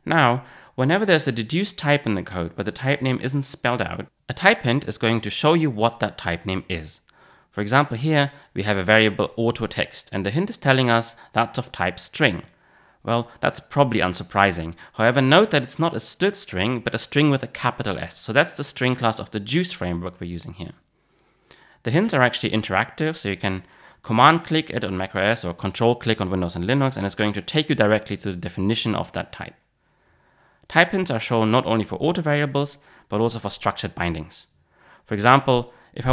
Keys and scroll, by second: 30.0 alt+super+[.